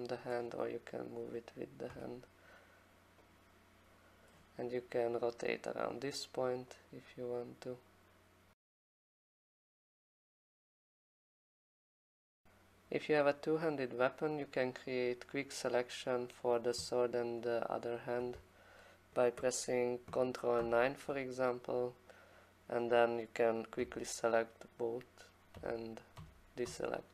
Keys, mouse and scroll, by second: 0.3 click, 1.4 click, 1.5 click, 1.9 e, 4.2 click, 4.3 click, 4.9 e, 5.8 right click, 9.1 click, 9.9 click, 12.1 click, 12.5 alt+click, 15.6 click, 15.8 click, 20.6 ctrl+shift+9, 22.9 click, 23.8 9, 25.6 9, 26.2 9, 26.7 9.